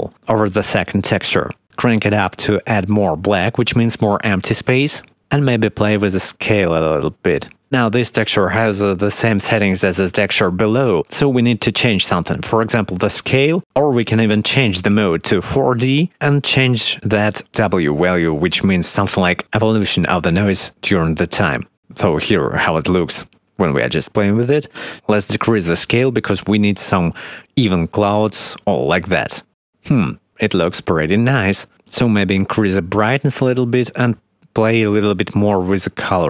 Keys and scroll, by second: 26.9 1.